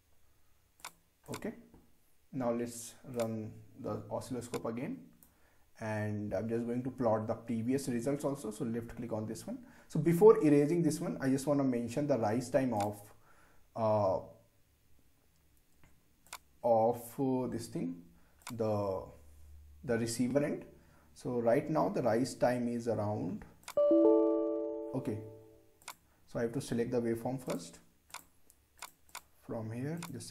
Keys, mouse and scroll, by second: 0.8-7.6 drag, 12.8 click, 16.3 click, 23.6 click, 27.2-30.3 drag.